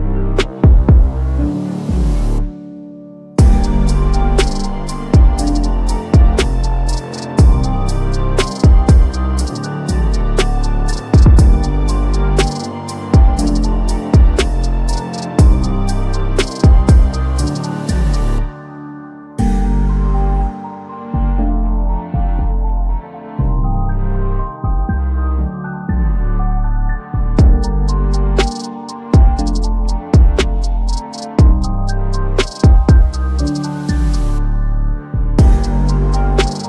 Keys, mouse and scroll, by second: 0.1 right click, 1.0 click, 1.4-3.7 typing, 4.0 click, 4.5 right click, 4.7 click, 5.1-6.3 typing, 7.1 click, 7.3 right click, 7.7 click, 7.9-11.0 typing, 11.1 click, 11.5 right click, 11.9 click, 12.2-13.7 typing, 13.9 click, 15.6 click, 16.9 ctrl+y, 18.9-19.7 typing, 21.6 click, 22.7-23.9 drag, 31.2-32.4 drag, 35.0 s, 35.6-36.6 drag.